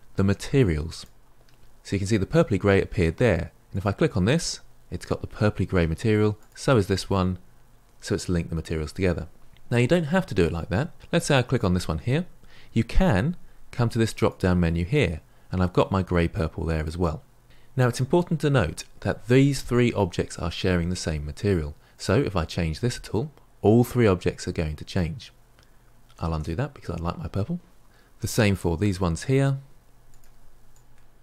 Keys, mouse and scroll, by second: 0.9 ctrl+l, 3.7 click, 6.4 click, 11.5 click, 16.2-17.4 drag, 22.6 click, 26.1 ctrl+z, 28.5 click, 30.6 click.